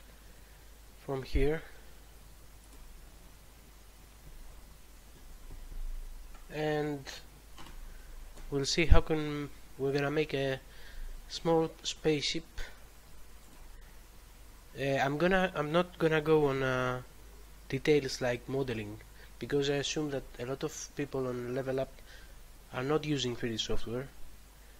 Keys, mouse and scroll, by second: 13.3 click, 13.5 click, 21.5 click, 21.7 click.